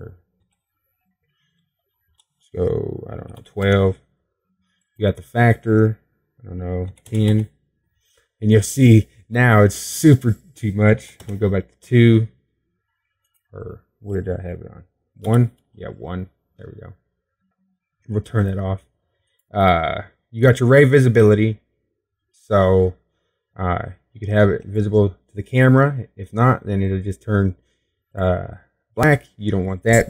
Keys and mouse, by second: 14.1 click, 21.5-25.6 drag, 27.9-29.8 drag, 29.8-30.0 middle drag.